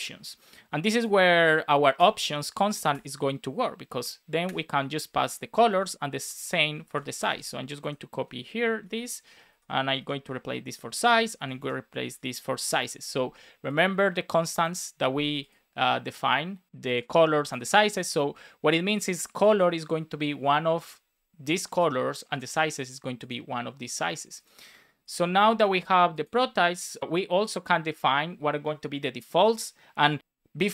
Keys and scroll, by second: 1.9 Return, 4.4 Return, 4.9 Right, 5.4 shift+super+Left, 5.6 super+c, 5.7 super+Right, 6.6 shift+super+Left, 6.8 super+c, 6.9 Right, 7.1 Return, 7.2 super+v, 7.7 alt+Left, 8.9 super+Left, 9.4 alt+shift+Right, 10.8 super+Right, 11.1 Left, 12.6 Return, 12.9 super+s, 25.4 super+s, 30.2 space.